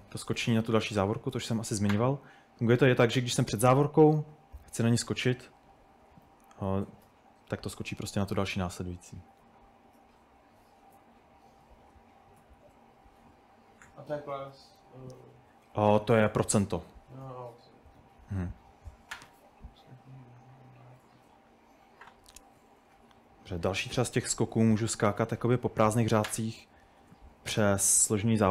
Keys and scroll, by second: 0.0-2.2 typing, 4.4-7.1 typing, 11.5-13.8 typing, 15.3-19.2 typing, 25.9 typing, 27.0 typing, 28.3-28.5 typing.